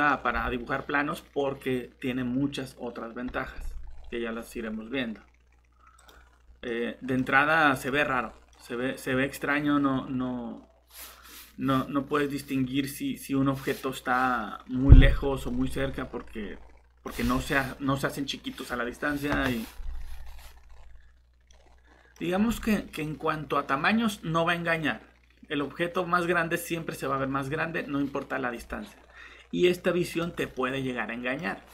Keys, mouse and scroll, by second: 3.9 scroll up 1, 6.0 click, 6.7 middle click, 7.7 click, 8.1-8.5 scroll down 1, 8.5 middle click, 14.7 scroll down 1, 15.5 middle click, 20.2-20.9 scroll up 1, 21.5 middle click, 30.1 click, 30.5 middle click.